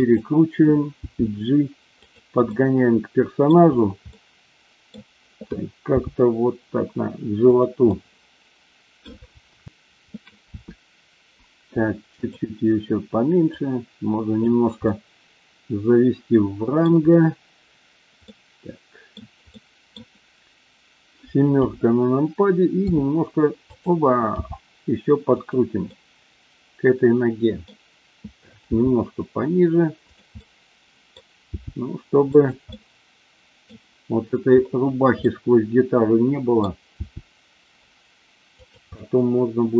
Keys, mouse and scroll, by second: 0.0 click, 1.0 g, 2.5-3.4 middle drag, 4.1 middle click, 6.0 g, 7.5 click, 7.9 scroll up 1, 8.0 middle click, 10.5 r, 12.1 click, 13.5 click, 14.8-16.7 middle drag, 18.3-19.1 middle drag, 19.5 scroll up 1, 19.6 middle click, 21.6 KP_7, 22.9 r, 23.7 click, 24.3 g, 25.3 drag, 25.8 scroll up 1, 26.0-27.6 middle drag, 28.6 g, 30.1 click, 30.4-31.1 middle drag, 32.2 click, 32.7 scroll up 1, 32.8-33.6 middle drag, 35.2 scroll up 1, 35.4-36.7 middle drag, 36.6 scroll up 1, 36.8 g, 38.5 click, 38.8-39.7 middle drag, 38.8 scroll up 1.